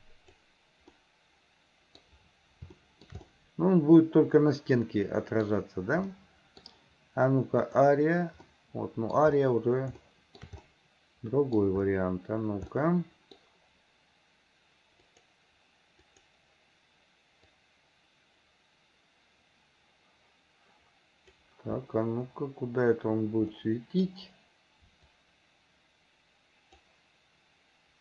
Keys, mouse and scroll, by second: 1.0-2.0 middle drag, 2.8 shift+middle click, 3.3-5.5 middle drag, 6.2 middle click, 7.7 click, 8.5 middle click, 10.0 shift+middle click, 10.7-11.7 middle drag, 12.8 middle click, 15.1 click, 16.1 click, 17.5-21.4 drag, 23.6 middle click, 25.2-26.8 drag.